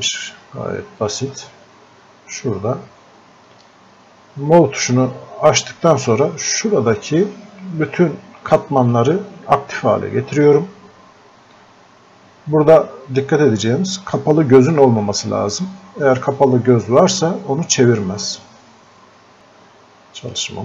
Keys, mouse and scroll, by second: 1.0 click, 7.9-20.6 drag.